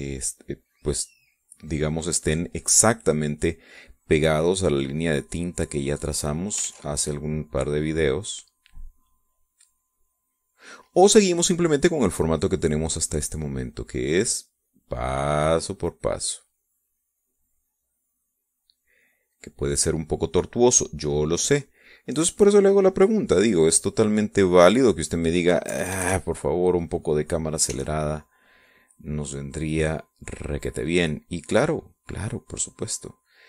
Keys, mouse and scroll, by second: 2.0-3.6 drag, 4.4-7.2 drag, 7.4 ctrl+z, 8.1-11.4 drag, 12.7-14.0 drag, 14.4-17.2 drag, 17.5-23.8 drag, 24.2-25.6 drag, 26.4 KP_Add, 26.9 middle click, 28.4 e, 28.8-33.2 drag.